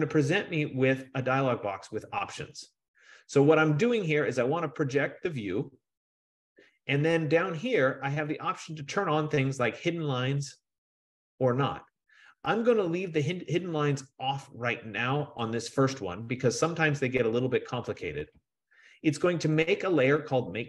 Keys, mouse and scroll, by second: 15.8-20.6 drag.